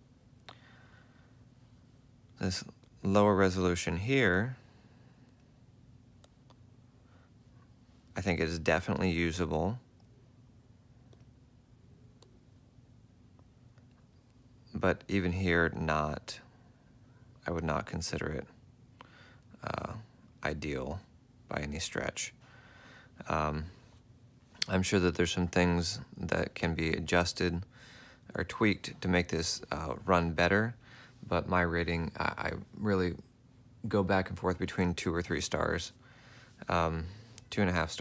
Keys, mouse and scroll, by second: 4.7 F4, 5.9 F4, 9.9 F4, 11.7 F4, 16.1 ctrl+alt+click, 18.2 ctrl+alt+click, 19.4 ctrl+alt+click.